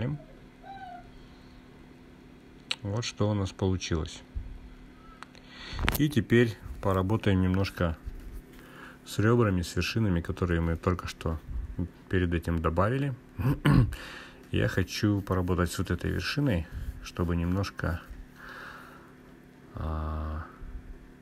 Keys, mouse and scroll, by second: 0.5 click, 2.7 drag, 3.5 click, 5.3-9.3 drag, 13.2-14.7 drag, 15.5 click, 18.2-19.2 drag.